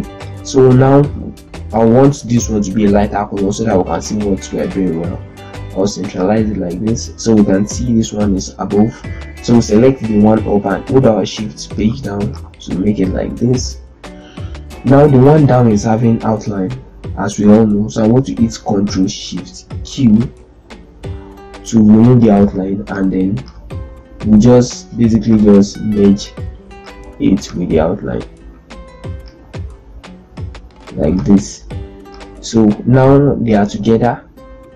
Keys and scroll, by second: 11.1 shift+Page_Down, 12.4 z, 14.7 ctrl+space, 19.7 ctrl+shift+q, 34.6 ctrl+z.